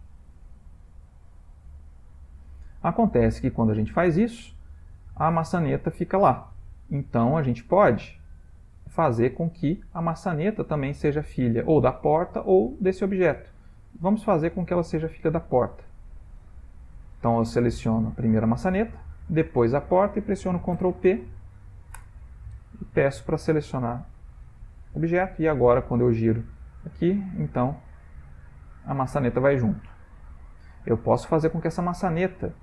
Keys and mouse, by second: 8.1 ctrl+middle click, 9.0 shift+middle click, 9.8 ctrl+middle click, 10.7 click, 15.3 shift+click, 18.1 click, 19.4 shift+click, 20.7 ctrl+p, 23.4 ctrl+middle click, 23.7 ctrl+middle click, 24.9 click, 25.6 r.